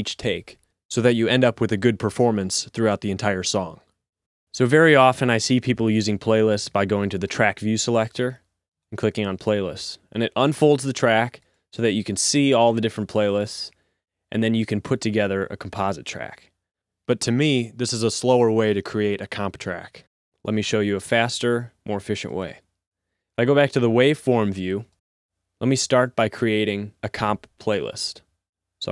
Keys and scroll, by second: 12.4 r.